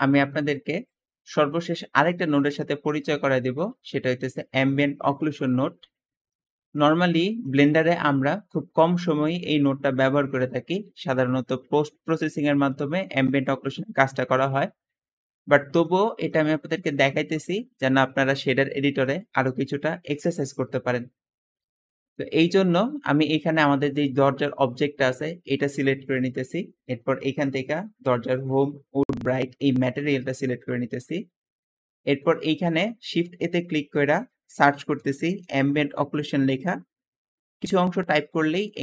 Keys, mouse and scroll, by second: 19.7 middle click, 24.9 g, 26.2 g, 32.9 shift+a, 33.0 shift+a, 34.7-35.4 typing.